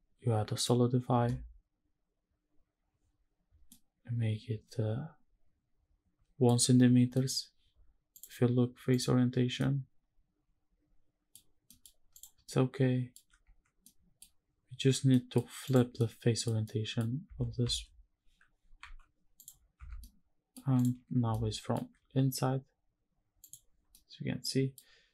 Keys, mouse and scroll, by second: 3.4-6.1 middle drag, 6.6 scroll down 2, 6.8 middle click, 7.8-9.0 drag, 9.3-11.0 middle drag, 11.4 middle click, 11.8 click, 12.1 middle click, 13.5 middle click, 14.8 middle click, 15.3 click, 15.7 middle click, 16.3 middle click, 17.0 Tab, 17.3 a, 18.5 alt+n, 19.5 Tab, 19.7 middle click, 20.4 click, 21.0 shift+middle click, 23.1 click, 23.6 middle click.